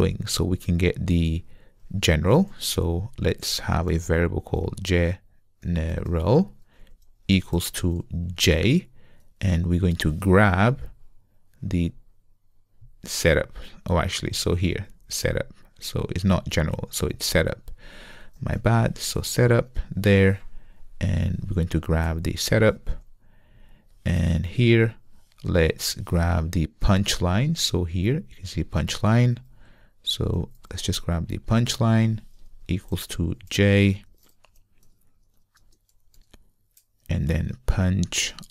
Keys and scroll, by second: 16.6 super+c, 18.3 super+c, 22.3 super+v, 30.4 super+c.